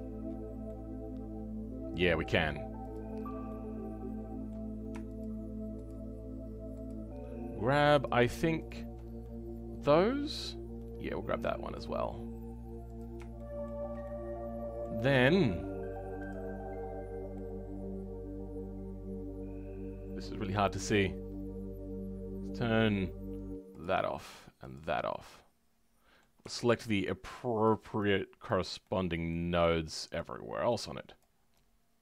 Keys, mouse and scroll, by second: 0.6-2.9 middle drag, 2.9 click, 3.1 scroll down 2, 3.4-5.2 middle drag, 5.2 shift+click, 5.8 shift+click, 9.2-12.8 middle drag, 12.8 click, 13.3 shift+middle click, 14.0-17.3 drag, 17.3-20.3 middle drag, 24.6 click, 25.2-27.6 right drag, 25.2 middle click, 27.6 shift+click, 28.8-30.1 shift+middle drag, 30.1 shift+click.